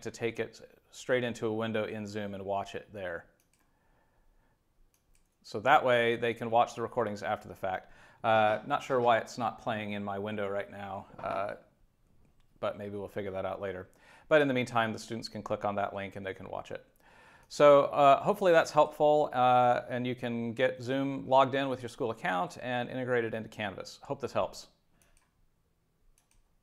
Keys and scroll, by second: 5.7 super+w.